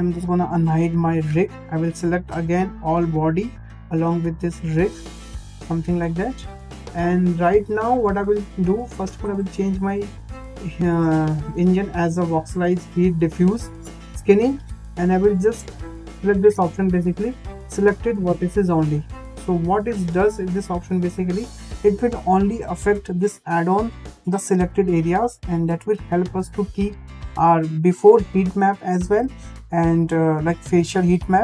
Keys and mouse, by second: 0.5 alt+h, 1.8-3.1 drag, 4.2 shift+click, 5.8 shift+click, 9.0-13.3 drag, 20.3 click.